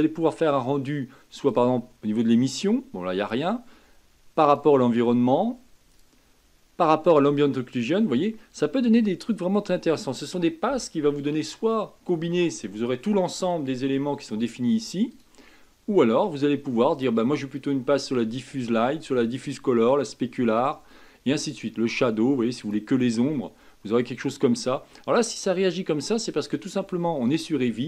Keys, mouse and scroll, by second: 8.3-11.4 middle drag, 15.1-18.1 drag.